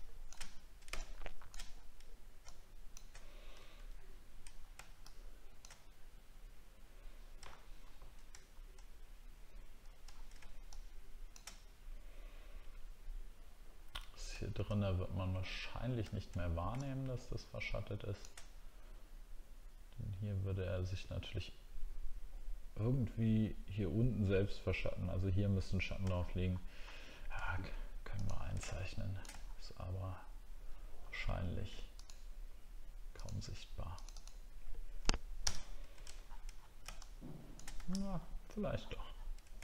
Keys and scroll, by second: 0.4 alt+scroll down 5, 7.5 alt+scroll up 1, 8.5 alt+scroll up 1, 10.1 alt+scroll down 1, 14.4 alt+scroll down 1, 16.1 alt+scroll down 1, 26.1 alt+scroll up 1, 26.8-27.2 alt+scroll up 2, 29.4 alt+scroll down 7, 30.1 alt+scroll down 1, 30.6-31.0 alt+scroll up 2, 35.4 ctrl+BackSpace, 35.8 ctrl+d, 36.2 alt+scroll down 1, 37.8 alt+scroll up 7, 38.7-39.2 alt+scroll down 2.